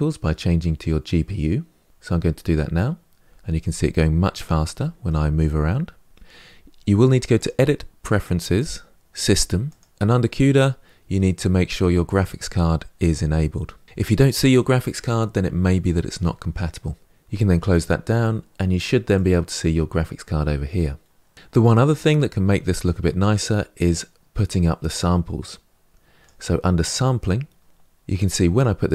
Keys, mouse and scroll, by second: 1.9 click, 4.2 click, 4.6-8.5 middle drag, 8.5 click, 21.9-24.9 middle drag, 24.9-28.9 drag.